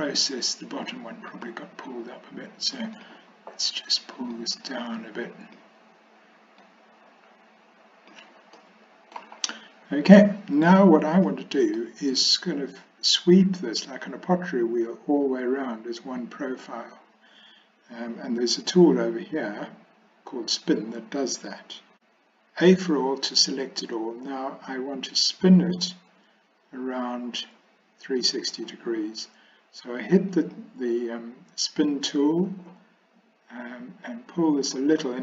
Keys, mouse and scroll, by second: 1.4 click, 3.0 click, 4.4-5.6 drag, 6.6-8.2 drag, 8.6 middle click, 11.3 shift+middle click, 22.8 a, 30.4 click, 34.1-35.1 drag.